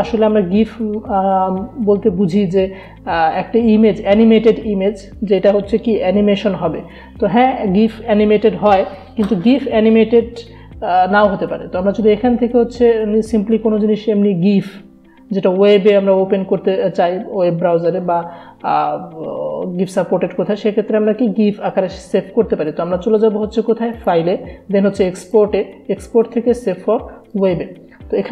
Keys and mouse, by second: 23.9 click, 24.0 click.